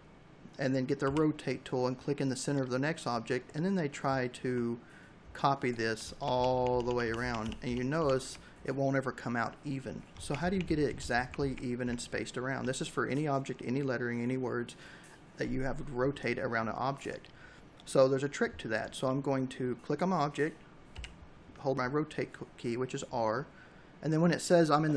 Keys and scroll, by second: 4.9 ctrl+d, 9.0 ctrl+z, 11.3 v, 19.7 r, 24.6 ctrl+u.